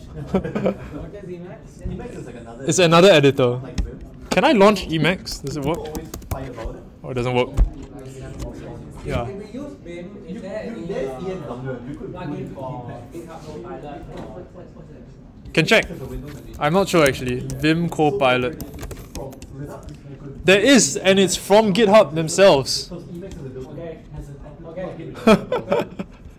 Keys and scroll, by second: 5.2-6.5 typing, 16.7-19.2 typing.